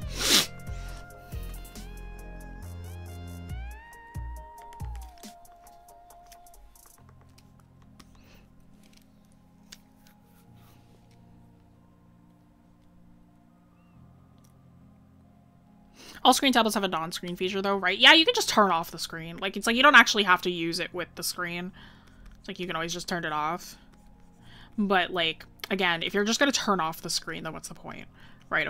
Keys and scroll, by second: 4.7 scroll down 1.